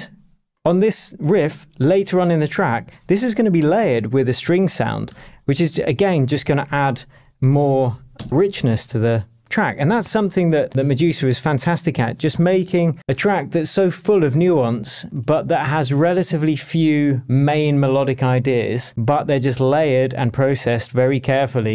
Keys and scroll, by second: 1.3 super+s, 5.2 shift+super+d, 6.8 super+r, 7.6 shift+super+t, 7.8 shift+o, 8.1 space.